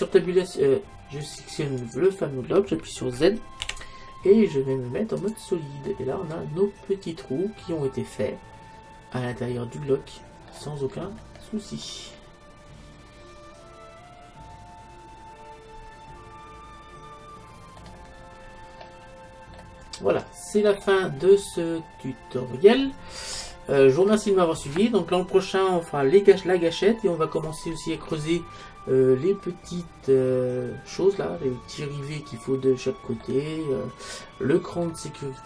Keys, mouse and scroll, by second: 0.2 Tab, 1.9-5.2 right drag, 3.7 z, 5.9-7.9 middle drag, 11.0-12.7 middle drag, 12.9 middle click, 17.8-18.9 middle drag, 20.8-22.8 middle drag, 23.6 middle click, 31.7 middle click, 33.0 middle click, 33.8-35.4 middle drag.